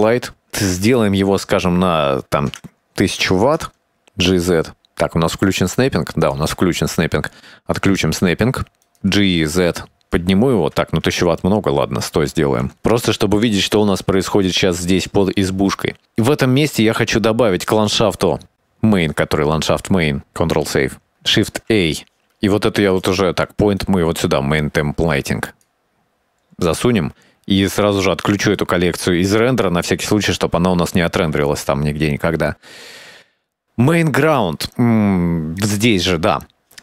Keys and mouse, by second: 0.1 click, 0.3 click, 2.0-3.9 drag, 3.2 KP_0, 4.3 g, 9.1 g, 11.8 click, 12.6 KP_0, 13.8-14.9 shift+middle drag, 15.5-17.0 middle drag, 20.4 ctrl+s, 22.3 shift+a, 23.9-26.5 drag, 29.2 click, 35.6 click.